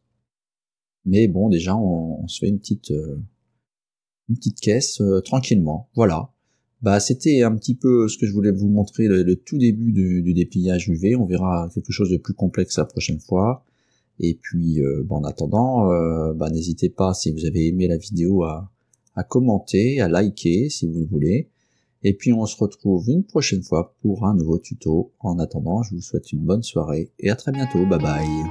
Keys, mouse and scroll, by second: 12.2 scroll down 2, 12.9-22.3 middle drag, 26.2-27.6 middle drag.